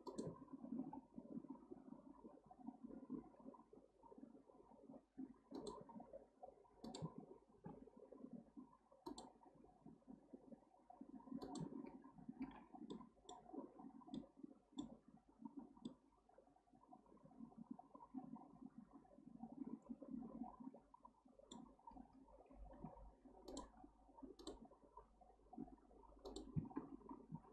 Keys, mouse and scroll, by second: 0.8 k, 7.5 k, 12.9-15.0 middle drag, 15.0-15.6 scroll up 1, 15.6-15.9 scroll down 1, 15.9-18.9 middle drag.